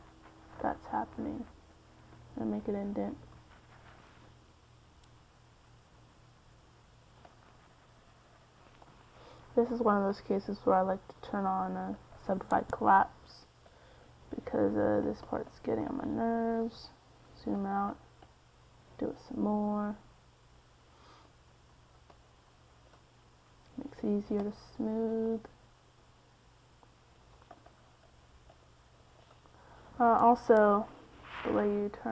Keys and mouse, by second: 1.8 middle click, 2.6-5.7 drag, 5.7 middle click, 6.1 middle click, 6.5 middle click, 7.3-8.8 drag, 10.4-12.8 drag, 14.6 f, 15.7 middle click, 16.2-18.7 drag, 18.7-20.9 middle drag, 24.8 middle click, 25.6-26.8 middle drag, 27.5-30.0 middle drag.